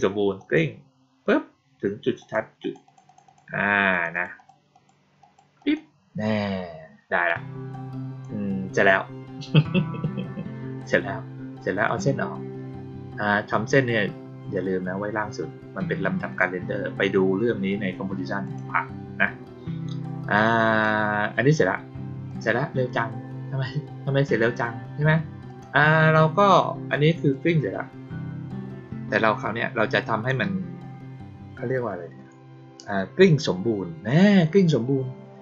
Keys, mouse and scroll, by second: 0.3 click, 2.1 click, 2.5 click, 2.8 click, 3.0 click, 3.2 click, 3.8 click, 4.1 click, 4.3 click, 4.6 click, 5.1 click, 5.5 click, 7.6-8.1 drag, 11.8 click, 18.4 click, 20.3-20.7 drag, 22.2 click, 25.4 click, 27.2-30.2 drag.